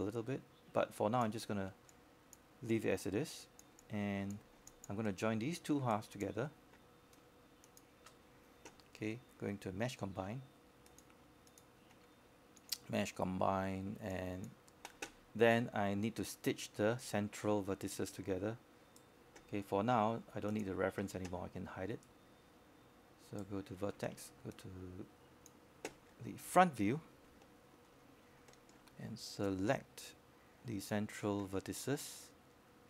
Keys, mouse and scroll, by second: 6.4-6.9 scroll up 1, 6.9-7.2 scroll down 1, 7.2-8.4 scroll up 1, 8.6-13.7 alt+drag, 13.9 alt+middle click, 14.4 alt+click, 15.2 alt+click, 16.3 alt+click, 17.1 scroll down 1, 17.2 alt+click, 17.6 right click, 18.7 click, 20.2 shift+click, 23.5-25.2 drag, 28.2-29.7 scroll up 1, 29.7-30.2 scroll down 1, 30.6-32.2 right drag.